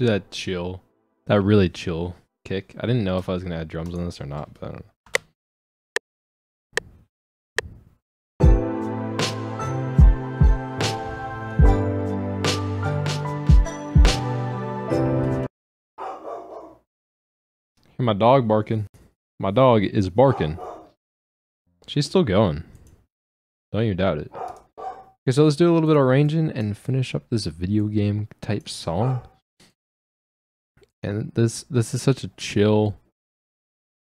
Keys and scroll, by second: 5.1 space, 21.7 ctrl+space.